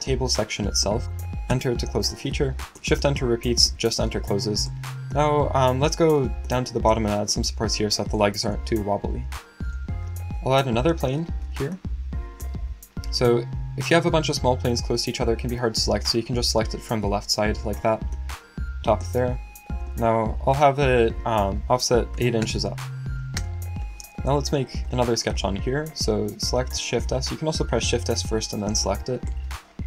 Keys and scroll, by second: 22.1 8, 26.5 shift+s, 27.7 n.